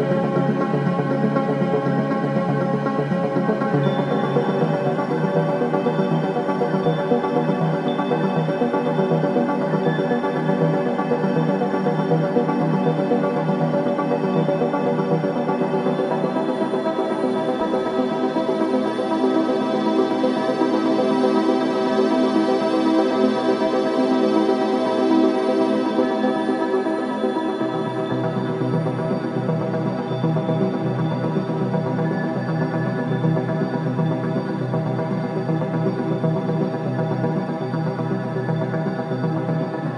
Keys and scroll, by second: 16.7 ], 18.9 ], 23.0 ], 25.5 4, 29.2 3, 29.6 ], 30.8 ], 35.6 ], 37.4 ], 38.7 5, 39.3 4.